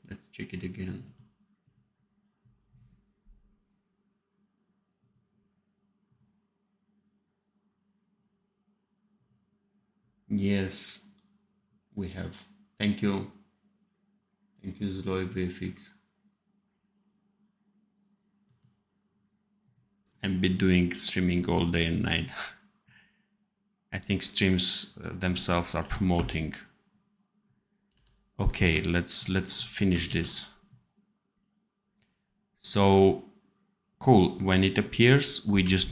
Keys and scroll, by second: 25.7 v, 26.0 space, 27.8 v, 30.0 ctrl+s, 35.5 v.